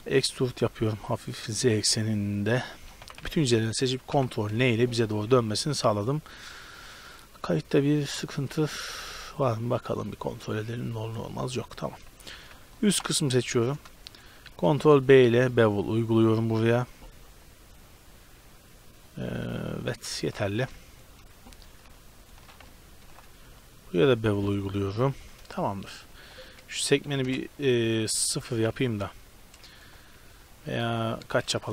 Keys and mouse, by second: 0.2 e, 3.1 a, 3.3 a, 4.2 ctrl+n, 5.2 a, 13.0-15.0 middle drag, 14.7 ctrl+b, 20.6 a, 20.9-22.2 middle drag, 22.2-23.9 right drag, 23.1 ctrl+b, 26.2-28.1 drag, 28.3-30.2 drag.